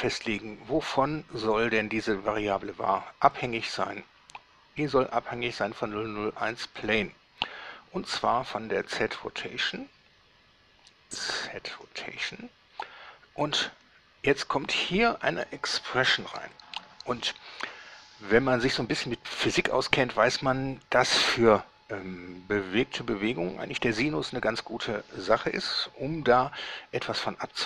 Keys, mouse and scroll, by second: 3.6 click, 7.0 click, 8.4 click, 12.0 click, 15.1 click.